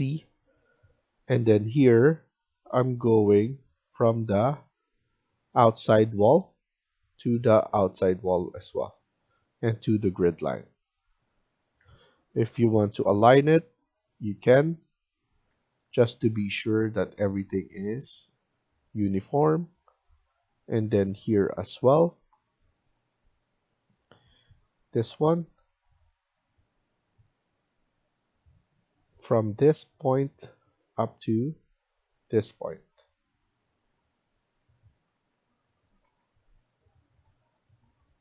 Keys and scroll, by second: 10.5 Escape, 11.7 Escape, 11.9 Escape, 12.3-13.0 typing, 15.4 Escape, 35.9 Escape, 36.2 Escape.